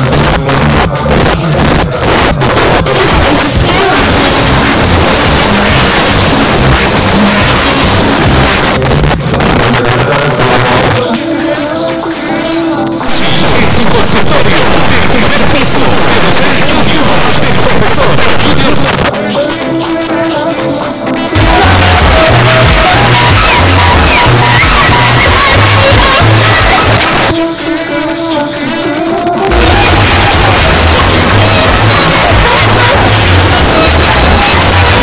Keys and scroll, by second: 8.7 Page_Down, 18.8 Page_Down, 27.0 Page_Down.